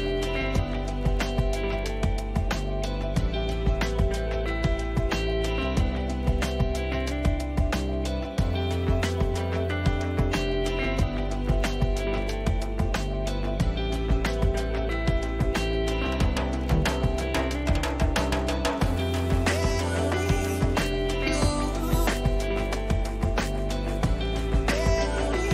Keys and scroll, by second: 19.3 ctrl+-.